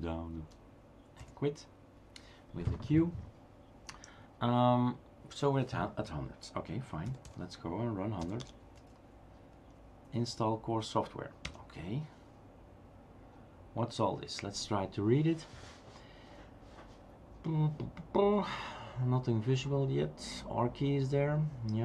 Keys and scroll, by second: 0.4 Page_Down, 1.2 q, 7.1 space, 8.7 Tab, 8.7 typing, 11.5 Return.